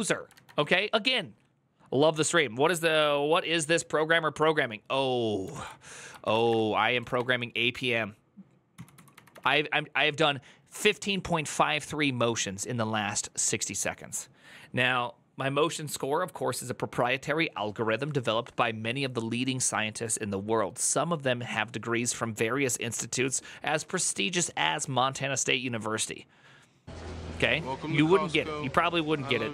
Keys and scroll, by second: 5.3 alt+{, 5.9-9.6 typing.